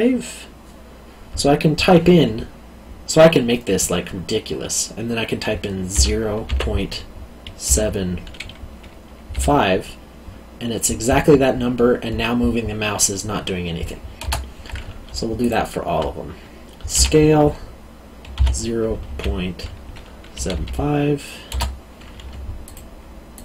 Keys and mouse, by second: 5.9 0, 6.4 ., 7.7 7, 9.3 5, 15.4 alt+click, 16.9 s, 18.3 0, 19.0 ., 20.3 7, 20.5 5, 22.6 alt+click.